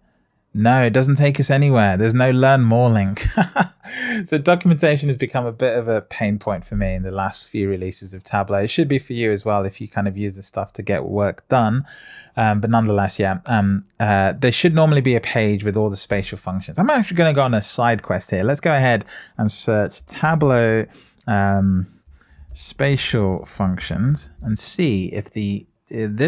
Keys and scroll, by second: 24.4 Return.